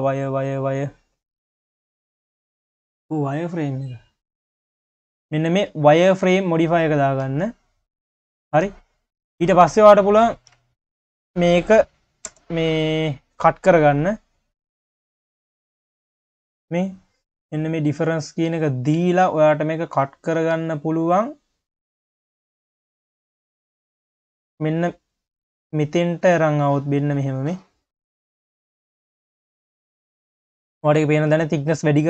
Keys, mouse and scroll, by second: 5.7 q, 7.5 q, 9.5 click, 10.1 click, 10.7 shift+click, 12.3 ctrl+KP_Add, 13.1 q, 14.3 scroll up 2, 14.5 q, 16.0 click, 16.7 q, 18.5 q, 19.6 click, 20.2 q, 21.9 click, 27.6-28.0 scroll up 1, 28.0 q, 28.7-29.8 scroll up 1, 29.8-31.3 scroll down 4, 31.3-32.0 drag.